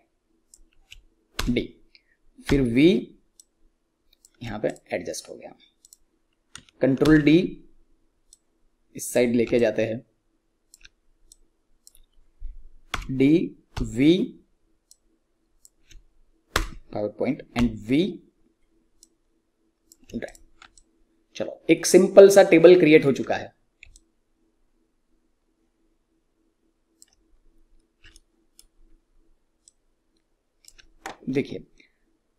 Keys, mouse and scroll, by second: 0.0-0.8 typing, 2.2-4.3 typing, 4.6 click, 7.0 ctrl+d, 8.2 click, 9.5-12.8 alt+drag, 12.8-16.4 typing, 17.5-20.0 typing, 19.0 click, 20.2 click, 20.6-23.3 alt+drag, 23.3-23.8 scroll down 1, 24.1-27.2 alt+drag, 27.2-27.9 scroll up 1, 28.0 alt+middle click, 28.6 scroll up 2, 29.6-32.1 alt+drag.